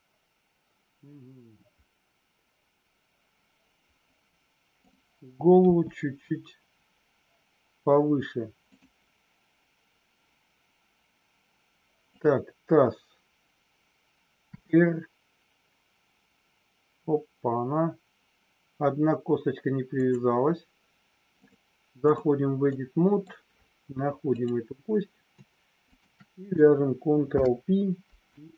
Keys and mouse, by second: 5.5 g, 12.0-12.8 drag, 14.4 r, 19.9 click, 21.4 click, 22.6 middle click, 24.2 click, 25.9 shift+click, 27.2 ctrl+p.